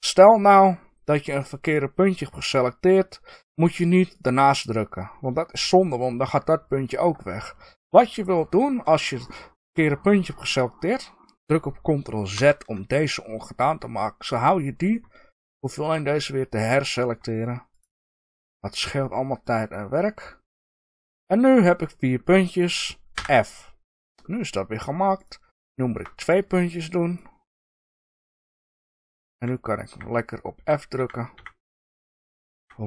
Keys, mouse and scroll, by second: 4.1 click, 6.7 middle click, 7.7 shift+click, 8.1-9.2 middle drag, 9.2 shift+click, 12.3 ctrl+z, 15.2 shift+click, 16.1 middle drag, 17.7 shift+click, 18.2-18.6 middle drag, 19.3 shift+click, 20.4 shift+click, 20.9-25.1 middle drag, 23.1 f, 25.1 click, 25.6-27.0 shift+middle drag, 26.0-26.6 scroll down 1, 27.0 shift+click, 28.0 shift+click, 28.5-32.8 middle drag, 28.9 f, 30.5 f, 32.5 f.